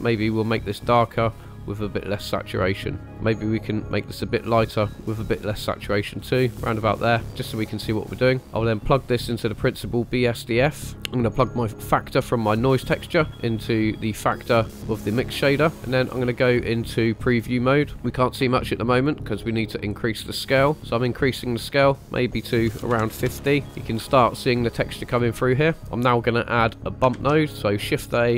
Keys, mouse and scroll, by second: 3.1 click, 8.4 ctrl+right click, 8.6 click, 8.7-10.9 drag, 11.9-14.5 drag, 15.7 shift+middle click, 17.6 click, 17.9-18.2 scroll up 2, 19.0-23.2 drag, 24.0-24.4 shift+middle drag, 24.6 scroll up 2, 25.4 scroll down 2, 27.1 shift+a.